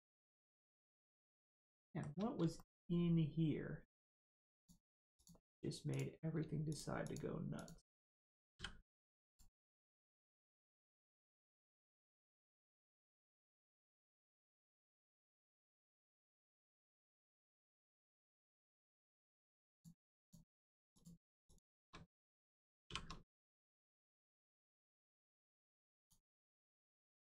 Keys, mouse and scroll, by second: 0.9 middle click, 1.0 middle click, 1.5 shift+middle click, 4.5 click, 6.7 shift+click, 7.0 shift+click, 8.5 click, 9.2 click, 10.4 shift+middle click, 12.1 middle click, 12.2 middle click, 12.7 shift+middle click, 13.6 middle click, 13.7 middle click, 14.2 shift+middle click, 16.7 shift+middle click, 17.3 middle click, 17.4 middle click, 17.8 shift+middle click, 18.6 middle click, 18.7 middle click, 19.7 click, 20.2 shift+click, 20.9 click, 21.4 shift+click, 22.8 shift+r, 23.7 middle click, 24.2 shift+middle click, 25.4 click, 25.9 click, 27.1 g.